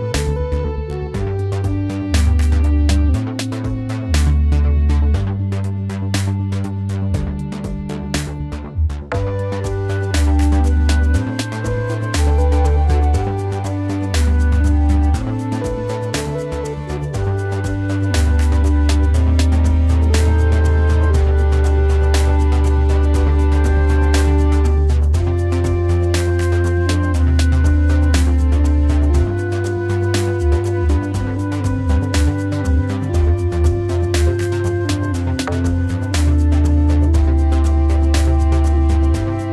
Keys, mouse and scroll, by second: 13.2 Delete, 38.9 ctrl+z.